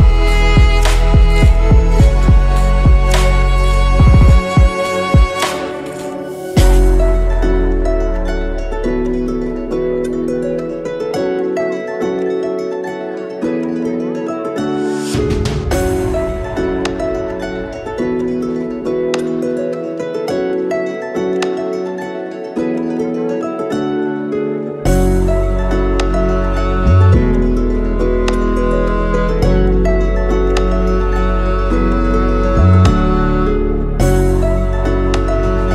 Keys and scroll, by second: 3.7 ctrl+z, 4.5 Tab, 5.5 BackSpace, 5.6 BackSpace, 5.6 2, 5.7 5, 16.3 F2, 20.2 Tab, 31.2 8, 31.4 F2.